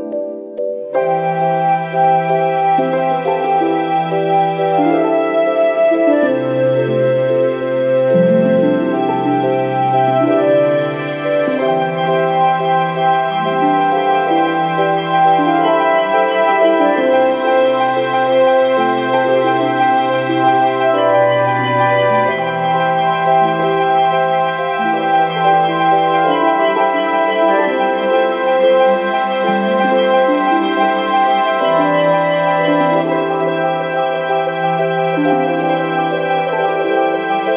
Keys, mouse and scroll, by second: 0.4 0, 2.2 click, 4.0 click, 5.3 click, 6.5 7, 6.9 ,, 7.7 5, 8.8 click, 10.3 0, 10.9 ,, 11.2 5, 12.3 click, 13.0-14.5 typing, 14.9-15.2 scroll down 2, 15.8 click, 17.2 click, 18.3 click, 19.7 click, 21.5 6, 22.4 click, 23.4 1, 23.7 2, 24.5 scroll down 2, 26.0 click, 26.6 right click, 27.4 click, 29.6 click, 31.0 click, 33.1-33.4 scroll up 2, 34.2-35.6 drag, 36.4 click, 37.0 click.